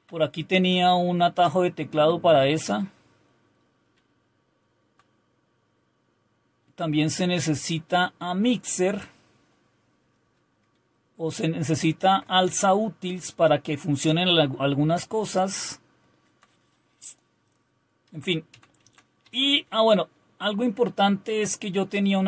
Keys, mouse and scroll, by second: 0.0-4.9 Down, 6.8 Up, 7.5-9.8 Up, 10.7 Right, 11.4-12.3 Right, 12.5 Down, 14.9 Down, 15.5-16.4 Down, 18.1 Down, 18.5 Down, 18.8 Down, 19.2 Up, 19.4 Up.